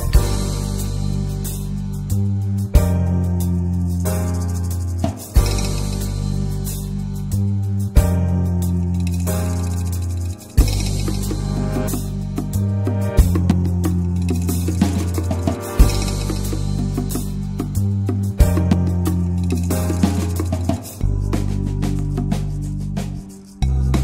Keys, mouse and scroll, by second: 0.4 n, 0.9-6.3 drag, 6.9-8.5 middle drag, 8.5 click, 8.8 a, 9.0 x, 9.9-10.3 shift+middle drag, 10.3 click, 10.6 shift+a, 13.4 alt+middle click, 13.8 scroll up 6, 14.6 a, 15.1 click, 15.4 Tab, 15.9-16.8 shift+middle drag, 16.8 click, 17.3 alt+z, 17.5 scroll up 2, 17.9 shift+middle click, 18.7 click, 21.4 Tab, 21.6 click, 21.8 scroll down 2, 22.1 middle drag, 22.4 alt+z, 22.7-24.0 shift+middle drag.